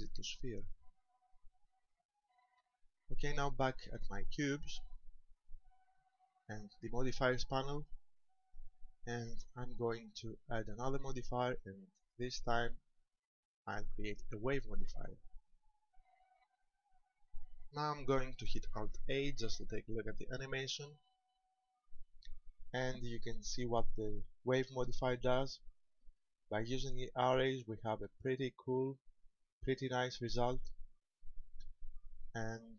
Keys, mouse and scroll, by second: 1.5 middle click, 4.7 right click, 7.7 click, 12.0 click, 16.5 middle click, 18.7 shift+middle click, 20.6 alt+a.